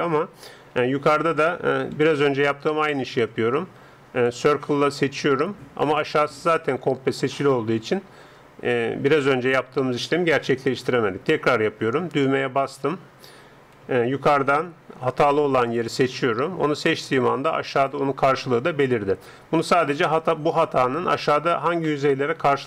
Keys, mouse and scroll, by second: 0.9 a, 2.0 c, 7.3-10.5 middle drag, 10.5 a, 12.7-15.1 drag, 13.8 a, 15.1 c.